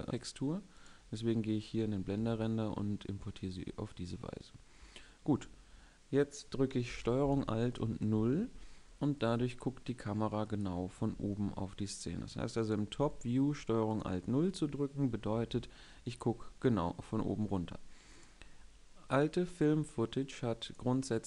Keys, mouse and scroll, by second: 0.1 a, 1.9 Tab, 7.0 ctrl+space, 7.8 ctrl+alt+KP_0, 10.8 g, 12.7 g.